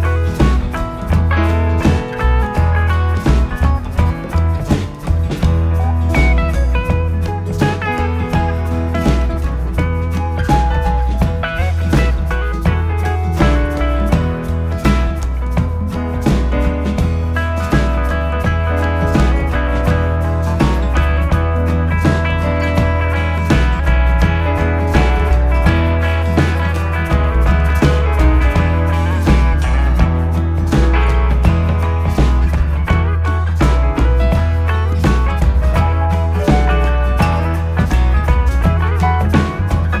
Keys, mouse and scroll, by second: 1.7 e, 4.9 e, 8.9 e, 12.2 e, 16.9 e, 21.5 e, 25.1 s, 28.5 e, 31.6 s, 34.0 e, 37.0 s, 38.5-40.0 scroll down 5.